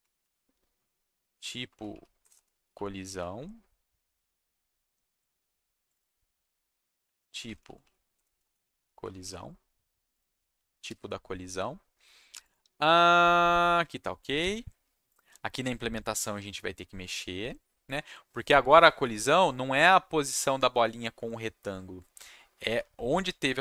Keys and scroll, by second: 0.0 Right, 0.5-3.5 typing, 6.3-9.7 typing, 10.8 ctrl+shift+s.